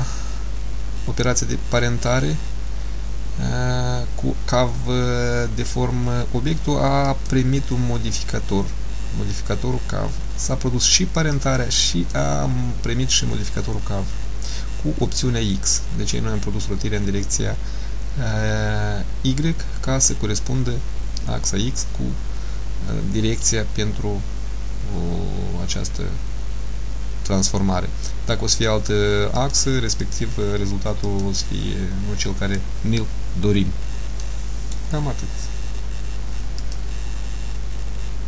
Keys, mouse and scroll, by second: 7.2 click, 11.4 click, 28.6 click, 29.5 click, 31.2 click, 34.3 middle click.